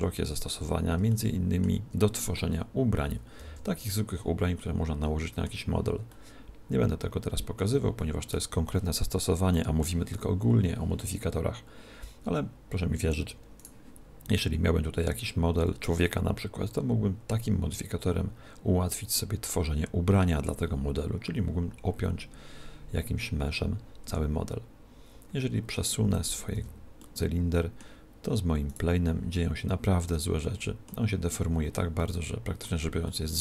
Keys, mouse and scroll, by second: 1.2-3.0 middle drag, 3.4 z, 4.6-13.6 middle drag, 13.6 right click, 24.1 r, 26.2 click, 26.6 z, 27.0 right click, 27.2-28.7 middle drag, 28.7 right click, 29.4-33.4 middle drag.